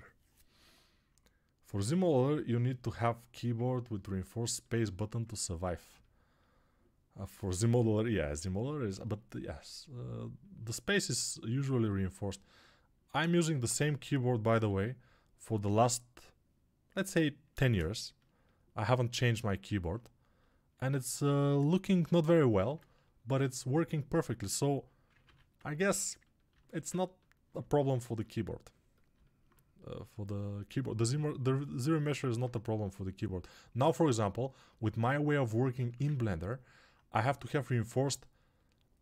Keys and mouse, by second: 2.8-4.4 alt+shift+right drag, 4.4-39.0 alt+shift+drag, 25.2 ctrl+r.